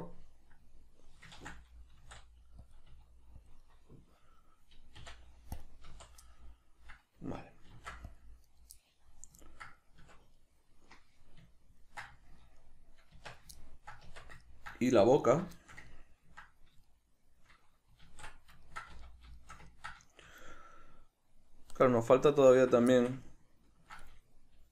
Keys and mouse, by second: 1.3 ctrl+z, 2.7 click, 2.9 s, 3.5 click, 3.6-5.0 middle drag, 5.0 x, 6.2-7.7 middle drag, 7.7 ctrl+r, 8.5 right click, 8.7-10.0 middle drag, 10.0 Tab, 10.3-15.2 middle drag, 13.1 Tab, 14.0 Tab, 15.2 alt+right click, 15.5-22.5 shift+middle drag, 18.0 alt+q, 18.9 z, 22.5 alt+right click, 22.9-24.7 shift+middle drag.